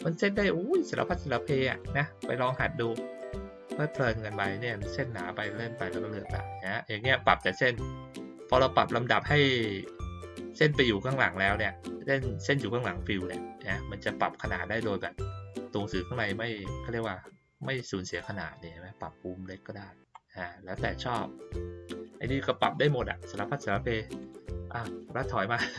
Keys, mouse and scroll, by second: 1.7 click, 2.7 click, 5.7-6.3 scroll up 2, 6.3-6.7 scroll down 2, 6.7 scroll up 2, 6.9-7.3 scroll down 2, 7.3 scroll up 2, 7.5 scroll down 2, 7.7 scroll up 2, 7.8 scroll down 2, 7.9 scroll up 2, 8.0 scroll down 2, 8.2-8.5 scroll up 2, 15.1 scroll up 2, 15.3-15.6 scroll down 2, 15.6 scroll up 2, 15.8 scroll down 2, 15.9 scroll up 2, 16.1-16.7 scroll down 2, 16.7-17.5 scroll up 2, 17.5-17.9 scroll down 2, 17.9-18.3 scroll up 2, 18.5-21.5 middle drag, 24.2 click, 24.8-25.7 ctrl+middle drag, 24.8-25.7 ctrl+scroll down 2.